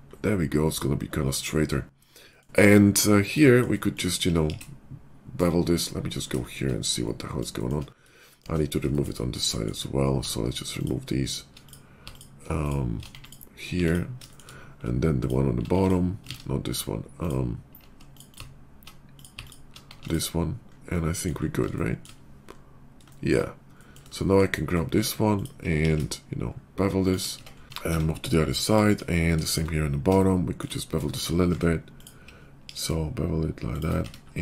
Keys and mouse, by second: 0.6 middle click, 0.7 click, 3.8 middle click, 4.3 ctrl+b, 4.9 shift+click, 5.4-9.5 middle drag, 5.8 /, 10.7 alt+click, 11.2 alt+click, 11.5 click, 12.1 alt+click, 13.1 z, 13.6 x, 15.1 alt+click, 15.7 x, 16.2 ctrl+z, 17.1 click, 17.2 middle click, 18.1 click, 18.2 alt+middle click, 18.4 alt+click, 18.7 middle click, 19.3 alt+click, 19.5-31.4 alt+middle drag, 19.8 x, 25.7 ctrl+b, 27.3 Tab, 27.6 Tab, 27.6 alt+x, 27.9 Tab, 31.4 Tab, 32.6 ctrl+b, 32.9 shift+middle click, 33.9 Tab.